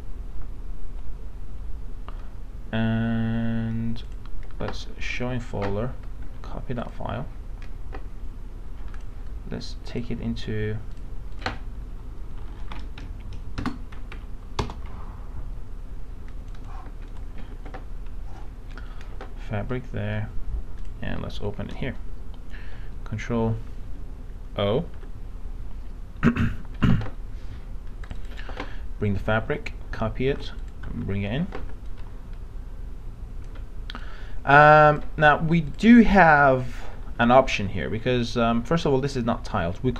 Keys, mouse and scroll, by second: 6.4 ctrl+c, 6.8 click, 13.0 KP_2, 16.3 click, 17.4 ctrl+v, 20.8 click, 24.8 ctrl+o, 28.0 click, 29.5 ctrl+a, 30.3 ctrl+c, 30.6 click, 31.0 ctrl+v, 31.6 ctrl+v, 31.9-35.2 drag, 37.5 ctrl+d.